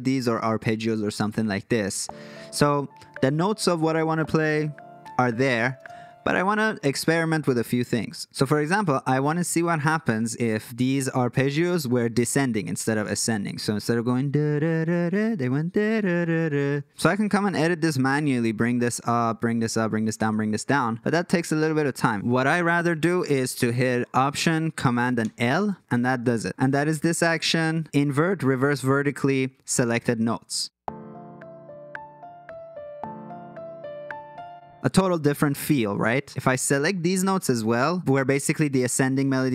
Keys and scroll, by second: 1.7 space, 5.8 space, 7.6 F3, 25.2 alt+super+l, 27.1 alt+super+l, 34.5 space, 36.0 F3.